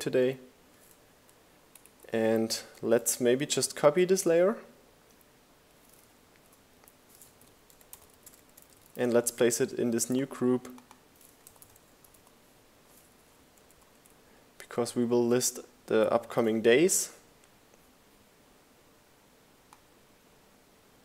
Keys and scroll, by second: 0.2 super+c, 3.4 super+g, 3.9-6.5 typing, 8.7 shift+g, 8.8 Return, 9.3 super+v, 10.5 shift+Left, 10.6 shift+Down.